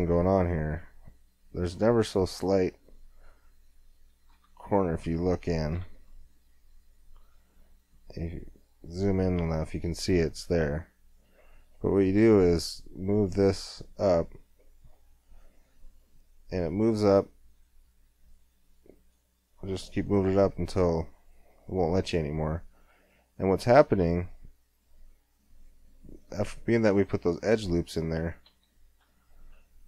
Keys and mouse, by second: 3.0-4.3 middle drag, 4.3 Tab, 4.3-6.0 drag, 6.0 KP_Decimal, 6.6 middle click, 7.8 middle click, 8.4 click, 11.1-19.8 drag, 19.8-23.8 middle drag, 23.8 Tab, 27.1 KP_1, 28.4 KP_5, 29.0 z.